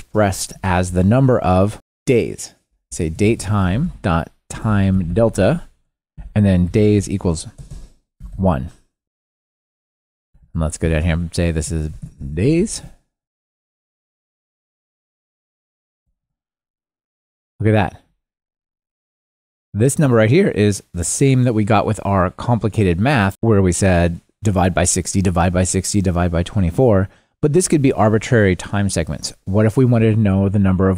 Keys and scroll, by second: 5.3 Return, 10.2 super+c, 11.3 super+v, 12.0 alt+shift+Left, 16.3 ctrl+r, 30.3 super+d.